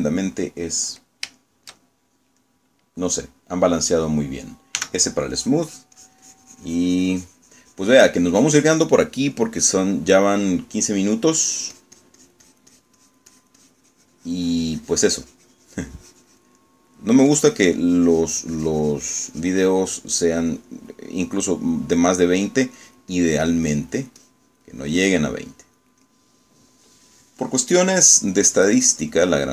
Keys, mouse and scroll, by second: 0.0 click, 0.6 click, 1.0 middle click, 1.7 middle click, 2.5 shift+click, 3.5 shift+click, 5.9 s, 6.4-10.2 drag, 10.4-11.8 middle drag, 12.6-18.2 drag, 18.4-21.0 drag, 21.0 middle click, 23.9-27.0 drag, 27.2 middle click, 28.0 middle click.